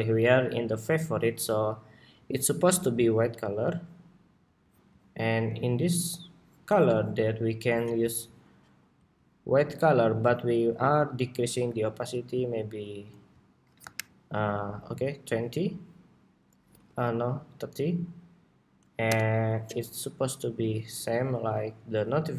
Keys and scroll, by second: 16.4 super+-.